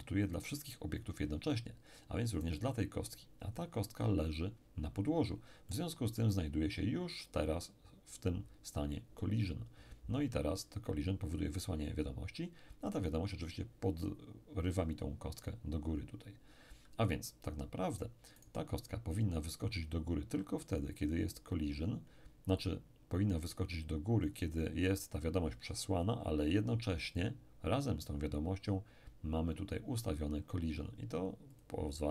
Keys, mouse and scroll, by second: 2.4 right click, 5.6-7.1 middle drag, 18.4 right click, 24.2 click, 27.1 click, 31.5 click.